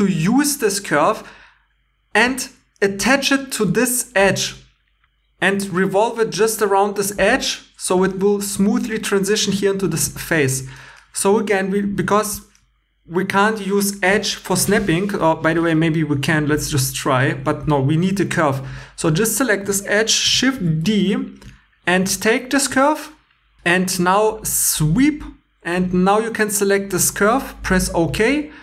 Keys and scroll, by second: 8.4 3, 11.3 2, 18.0 ctrl+z, 20.5 shift+d, 23.6 super+Tab, 28.2 2.